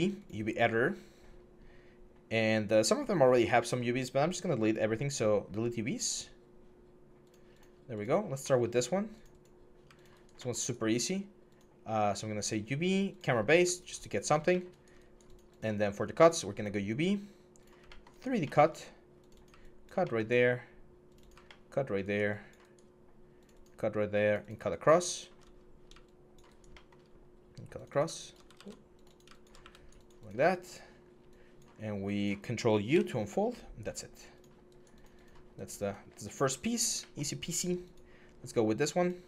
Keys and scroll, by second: 28.3 ctrl+z, 29.4 q, 32.7 ctrl+u.